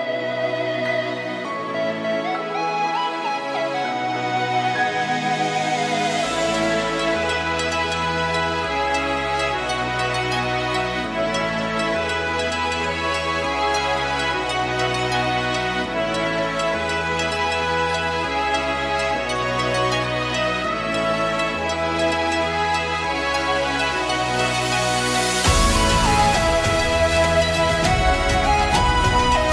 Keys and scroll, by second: 1.8 ctrl+g, 4.2 shift+Right, 4.4 shift+Right, 4.8 shift+Down, 5.0 shift+Down, 5.1 shift+Left, 5.7 shift+Right, 6.6 shift+Up, 20.6 ctrl+=, 24.7 x.